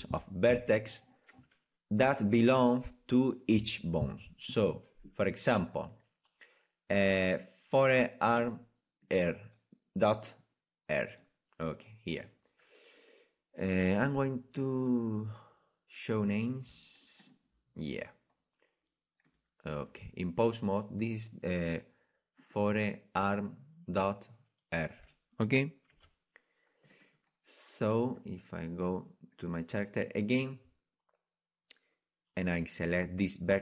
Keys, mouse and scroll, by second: 11.1-17.2 middle drag, 17.2-20.7 drag, 18.1-19.9 middle drag, 20.7-22.4 middle drag, 22.4-25.9 right drag, 25.9 r, 28.2-33.6 right drag.